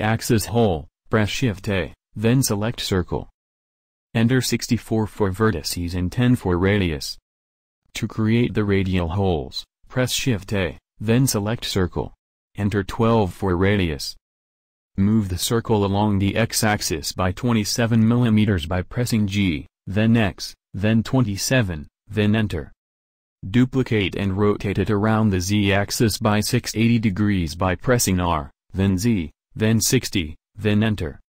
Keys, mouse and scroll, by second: 0.0 shift+a, 7.8 shift+a, 14.9 g, 23.4 shift+d, 25.5 shift+d, 27.5 shift+d, 29.4 shift+d, 31.2 shift+d.